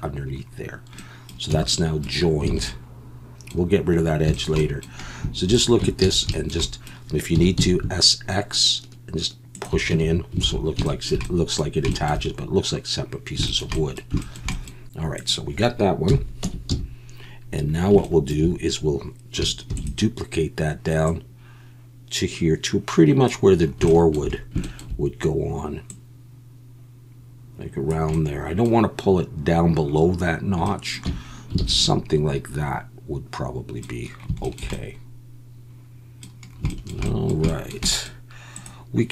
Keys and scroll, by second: 1.5 Tab, 2.5 alt+a, 5.8 Tab, 6.0 a, 7.3 s, 7.5 x, 9.9 Tab, 10.4 alt+a, 16.1 KP_1, 16.4 Tab, 16.7 a, 19.7 shift+d, 31.0 Tab, 31.6 alt+a.